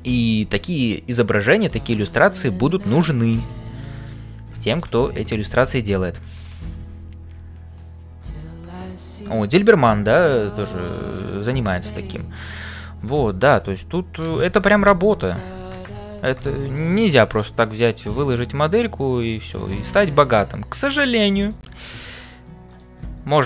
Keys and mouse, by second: 0.0-23.4 typing, 2.1 shift+middle click, 3.1 shift+middle click, 4.9 ctrl+s, 12.1 shift+middle click, 13.2 shift+middle click, 14.6 ctrl+s.